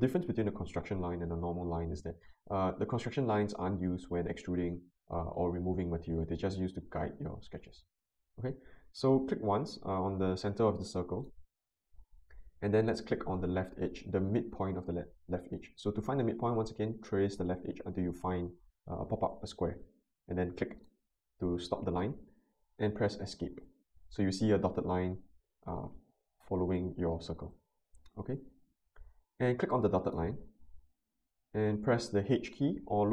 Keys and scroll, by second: 23.1 Escape.